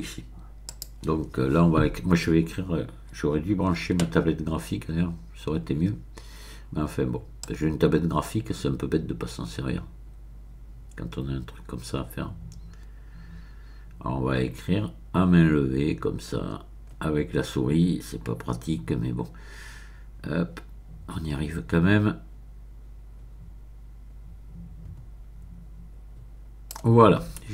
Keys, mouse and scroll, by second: 0.7 click, 7.4-27.3 drag.